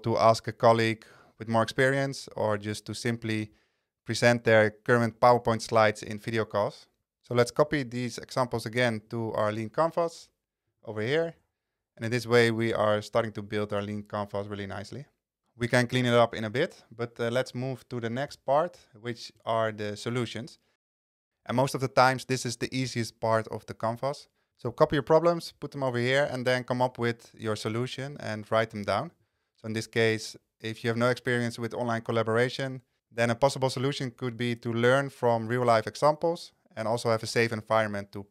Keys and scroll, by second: 11.3 super+v, 28.0 super+v.